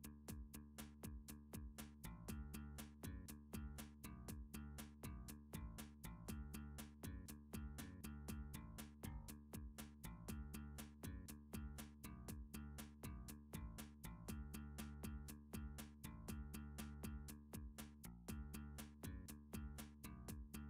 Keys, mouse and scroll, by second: 0.7 middle click, 2.0 click, 2.8 3, 4.2 d, 5.3 click, 6.0 r, 6.7 click, 7.5 alt+z, 8.3 g, 9.6 click, 10.7 middle click, 11.2 g, 11.7 x, 12.7 g, 13.1 click, 14.0 7, 15.7 g, 16.5 y, 17.5 click, 18.6 middle click, 19.2 s, 20.4 y.